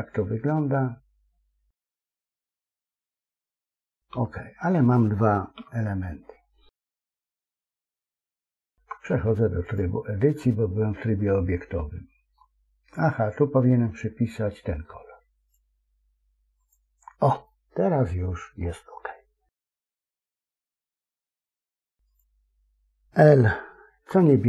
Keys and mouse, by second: 4.0 KP_1, 5.6 KP_3, 8.6 Tab, 10.3-12.3 middle drag, 13.0 middle click, 15.3 click, 17.4-18.5 middle drag, 19.7 KP_3, 21.0 middle click, 23.8 l.